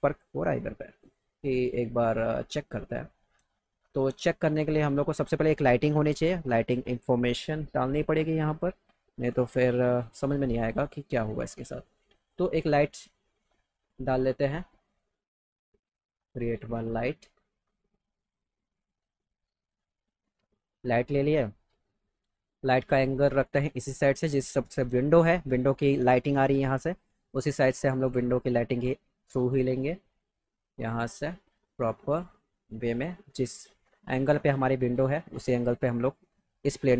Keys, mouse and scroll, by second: 10.6 click, 12.2 click, 13.5 click, 13.9 click, 14.2 click, 14.9 click, 18.0 click, 18.2 click, 18.8 click, 19.1 click, 19.7 click, 20.3 click, 22.9 middle click, 23.5-25.3 drag, 26.9 right click, 27.7 click, 29.2 click, 31.0 middle click, 31.7 click, 33.9 click, 35.2 middle click, 35.6 right click, 36.2 click.